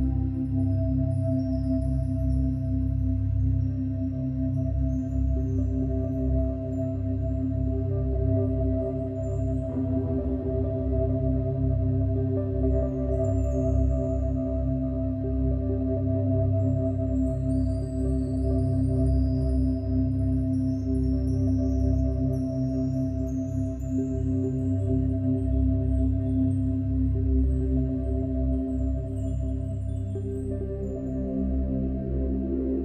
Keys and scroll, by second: 2.2 space, 3.7 space, 4.2 space, 5.1 space, 6.5 ctrl+e, 9.5 ctrl+=, 9.6 ctrl+-, 19.3 ctrl+s, 20.7 ctrl+-, 21.0 space, 22.4 ctrl+-, 22.5 ctrl+=, 22.9 space, 24.7 ctrl+alt+shift+n, 24.8 ctrl+alt+g, 25.9 ctrl+=, 26.1 space.